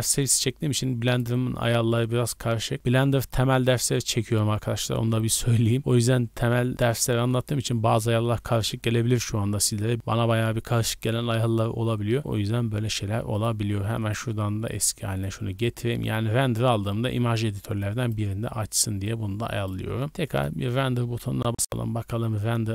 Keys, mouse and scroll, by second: 1.0-2.3 drag, 20.1 click, 21.3 click, 21.3-22.7 scroll down 4.